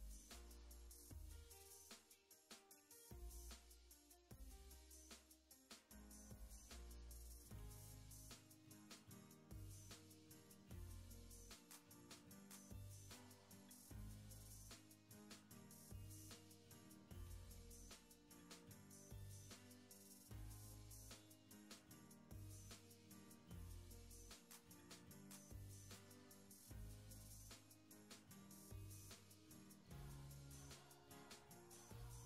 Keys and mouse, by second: 0.0 click, 0.6 click, 1.4 middle click, 1.6 click, 2.1 click, 2.9 shift+middle click, 3.6 shift+c, 3.7 ctrl+click, 4.1 ctrl+click, 4.7 ctrl+click, 5.7 middle click, 6.3 shift+middle click, 6.7 f, 6.8 middle click, 6.9 shift+c, 7.0 click, 7.5 middle click, 7.7 click, 8.2 click, 8.8 click, 8.9 shift+middle click, 9.2-11.5 typing, 9.3 ctrl+click, 9.7 middle click, 9.9 shift+middle click, 11.0 ctrl+click, 12.6 f, 12.8 shift+click, 13.3 middle click, 13.6 shift+c, 13.7 f, 13.7 middle click, 13.8 middle click, 14.0 ctrl+click, 14.2 ctrl+click, 14.5 ctrl+click, 14.8 middle click, 15.0 ctrl+click, 15.3 ctrl+click, 15.7 ctrl+click, 17.0 middle click, 17.2 shift+click, 17.9 shift+middle click, 18.7 g, 18.8 click, 19.0 click, 19.2 middle click, 19.3 click, 19.6 middle click, 20.1 click, 20.2 middle click, 20.9-21.4 ctrl+z, 21.5 middle click, 21.9 middle click, 22.0 ctrl+shift+z, 22.4 middle click, 22.9 shift+click, 23.1 click, 23.3 middle click, 23.5 click, 24.2 middle click, 24.6 click, 24.9 ctrl+z, 25.1 click, 25.2 ctrl+z, 25.3 middle click, 26.1 click, 26.7 click, 26.9 click, 27.2 click, 27.3 click, 27.5 middle click, 27.9 middle click, 28.1 click, 28.3 middle click, 28.6 click, 28.8 f, 28.9 shift+c, 29.0 click, 29.3 shift+middle click, 29.6 click, 29.9 click, 30.1 click, 30.5 click, 30.7 middle click, 30.9 click, 31.1 click, 31.3 click, 31.5 click, 32.1 ctrl+Tab.